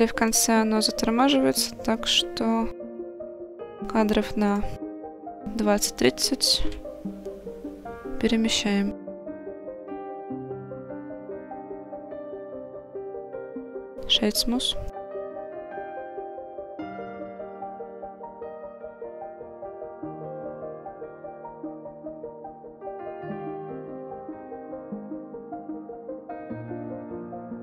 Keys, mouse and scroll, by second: 0.3-1.6 drag, 1.7 click, 2.9 g, 4.5 click, 6.0 click, 6.7 g, 9.5 click, 10.8 click, 15.0-16.5 right drag, 21.9 click, 22.6 click, 23.4 g, 24.0 click, 24.8 click.